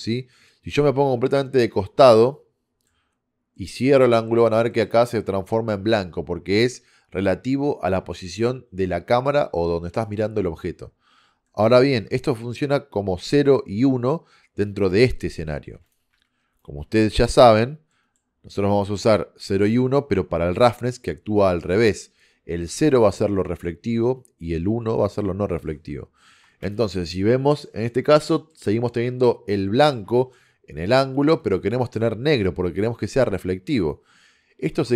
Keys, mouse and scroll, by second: 0.6-2.4 middle drag, 3.3-7.2 middle drag, 11.2 middle click, 13.4-15.6 middle drag, 16.2-17.6 drag, 16.2 a, 16.5 a, 16.7 b, 17.5 x, 19.2 click, 25.7 middle click, 26.7-28.3 drag, 29.9-32.7 middle drag, 34.8 shift+a.